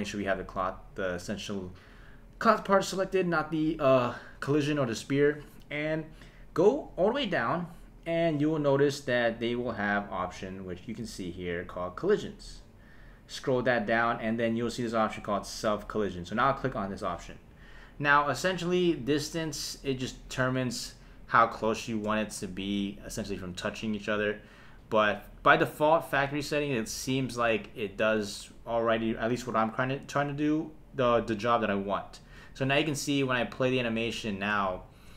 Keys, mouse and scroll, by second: 12.1 click, 16.3 click, 21.7 shift+Left, 23.6 space, 27.4 space, 32.4 space, 34.1 space, 34.7 shift+Left.